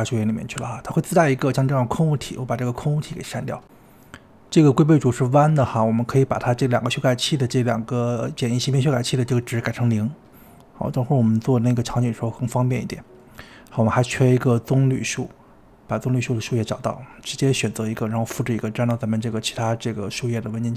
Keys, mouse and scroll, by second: 0.0-0.6 scroll down 7, 0.6 click, 1.0 click, 1.2 scroll down 3, 1.3-2.4 shift+middle drag, 2.4 click, 3.1 x, 4.1 click, 4.4-4.9 middle drag, 4.9 scroll up 2, 5.1-6.2 scroll down 5, 6.2 scroll down 1, 6.3 click, 6.6 click, 7.9-9.7 drag, 10.5-11.5 drag, 12.0 scroll up 2, 12.3-13.4 middle drag, 13.4-13.9 scroll down 2, 13.9-14.9 scroll down 1, 15.5 click, 16.1-16.6 middle drag, 16.6-17.2 scroll down 6, 16.8-17.2 middle drag, 17.2 click, 17.4-17.9 scroll up 7, 17.9 ctrl+c, 18.3 click, 18.9-20.2 scroll up 5, 20.2 click.